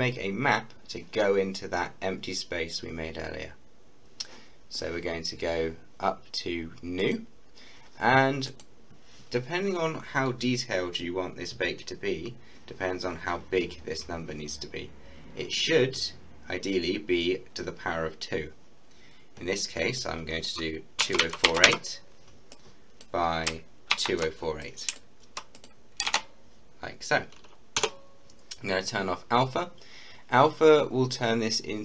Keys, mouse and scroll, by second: 7.0 click, 21.0-21.6 typing, 22.5-23.9 drag, 23.9 ctrl+c, 24.6 click, 26.0 ctrl+v, 27.8 Return.